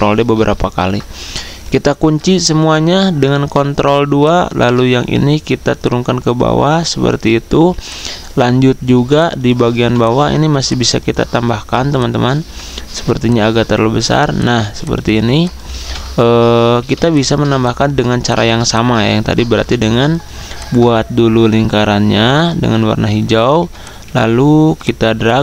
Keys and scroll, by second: 7.5 typing, 11.8-13.0 typing, 15.6-16.3 typing, 17.4 z, 19.5 i, 23.7 v.